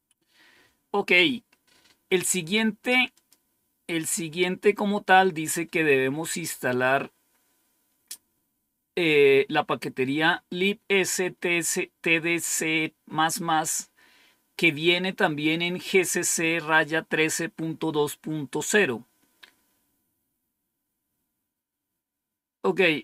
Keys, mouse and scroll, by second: 3.0 click.